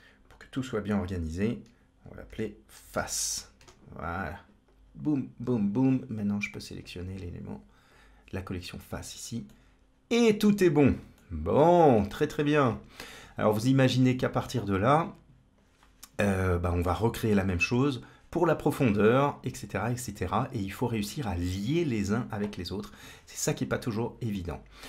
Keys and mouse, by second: 4.5-5.3 drag, 6.7-8.3 drag, 9.3-10.6 middle drag, 11.1-12.3 middle drag, 14.8-15.4 drag, 16.4 middle click, 18.7-19.9 middle drag, 23.5 middle click, 24.6-24.8 drag.